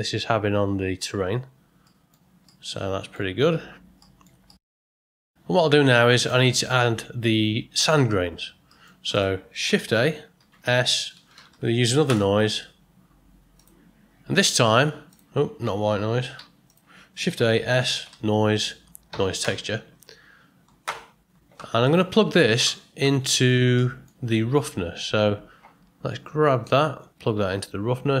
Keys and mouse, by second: 1.8 middle drag, 2.4-3.1 ctrl+middle drag, 4.1 middle click, 4.5 ctrl+middle click, 5.9 click, 8.7 middle click, 9.1 click, 9.8 shift+a, 16.3 x, 17.2 shift+a, 23.2 ctrl+middle click, 23.4 ctrl+middle click, 23.8 middle click, 26.4-28.2 drag.